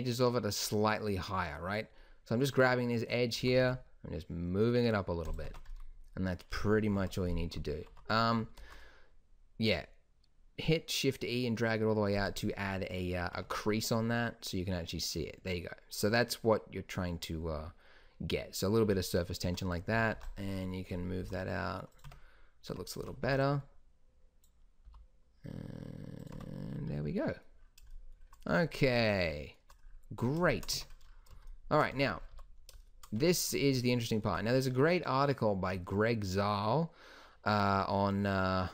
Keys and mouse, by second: 3.5 g, 5.6 Tab, 7.1 KP_1, 8.1 Tab, 8.7 shift+e, 13.5 Tab, 19.7 Tab, 20.1 a, 20.3 b, 21.4 s, 22.2 Tab, 22.8 Tab, 23.1 a, 23.5 b, 25.0 s, 26.5 Tab, 30.9 Tab, 32.1 a, 32.5 a, 33.3 Tab, 38.6 middle click.